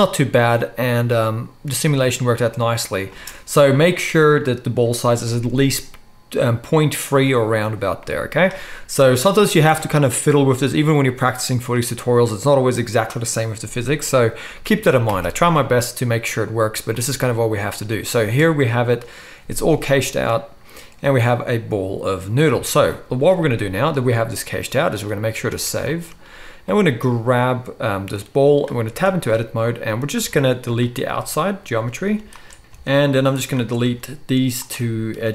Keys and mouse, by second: 3.1 space, 15.1 shift+Left, 18.2 space, 22.5 space, 25.3 ctrl+s, 25.5 ctrl+s, 25.6-26.7 shift+drag, 26.7-28.2 middle drag, 28.2-32.4 drag, 28.9 Tab, 30.2 x, 32.4 alt+shift+middle click, 32.6 ctrl+z, 32.6 alt+a, 32.9-33.7 alt+shift+drag, 33.7-35.3 middle drag, 33.8 x.